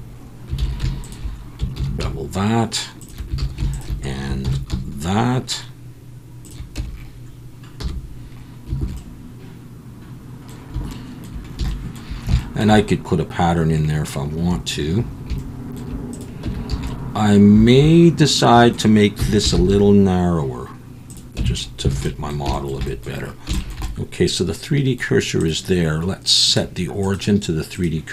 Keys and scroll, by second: 0.6 alt+a, 1.8 ctrl+b, 3.4 alt+a, 4.4 ctrl+b, 6.8 Tab, 7.8 /, 8.8 alt+a, 16.4 Tab, 16.7 a, 19.2 s, 19.5 shift+z, 21.4 Tab, 21.9 alt+a.